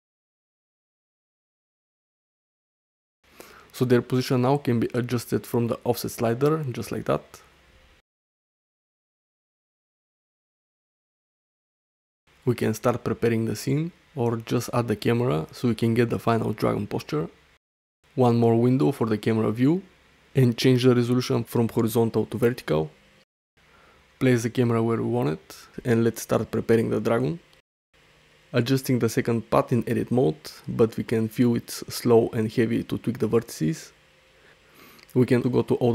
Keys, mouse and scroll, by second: 1.2 middle click, 1.4 middle drag, 1.7 shift+middle drag, 2.1-2.5 middle drag, 2.5 shift+middle drag, 2.8 middle click, 5.4-7.4 drag, 9.1-11.4 drag, 11.9 middle click, 12.8 middle click, 13.4 shift+a, 16.9 click, 19.5 shift+middle click, 22.2 click, 23.3 click, 24.4-25.8 typing, 27.2 shift+middle drag, 28.1 Tab, 28.6 click, 29.8 g, 32.3 shift+middle click, 32.6 middle click, 33.6 Tab, 34.4 click.